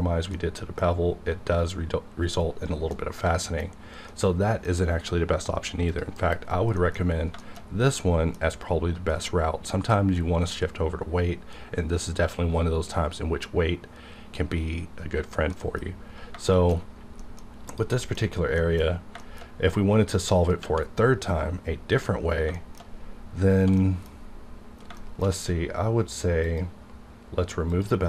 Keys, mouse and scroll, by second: 0.3-5.8 middle drag, 5.9 click, 6.2 KP_Decimal, 6.5 scroll down 1, 7.0 scroll up 1, 7.4 shift+middle click, 7.6 shift+scroll up 1, 8.1 shift+middle click, 15.6 middle click, 15.8 scroll down 1, 16.5 shift+middle click, 16.8 scroll up 1, 17.1 middle click, 17.6 click, 18.0 shift+middle click, 18.1 shift+scroll up 2, 18.6 middle click, 18.8 scroll up 1, 19.2 shift+middle click, 19.5 scroll down 1, 20.0 scroll up 1, 21.4-21.8 scroll down 1, 22.5 shift+middle click, 23.3 scroll down 1, 23.8 middle click, 24.2-24.8 scroll down 1, 25.0 shift+middle click, 26.0 click.